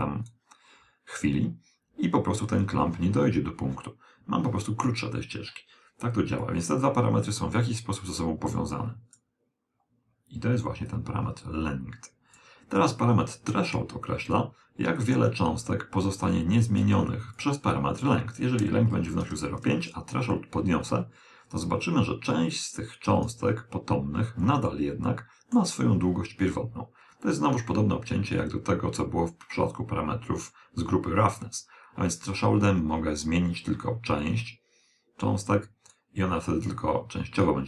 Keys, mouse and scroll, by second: 6.4 click, 8.8 click, 11.0 click, 15.0 click, 17.4 click, 20.2 click, 24.7-26.4 middle drag, 32.2 click, 36.8 click.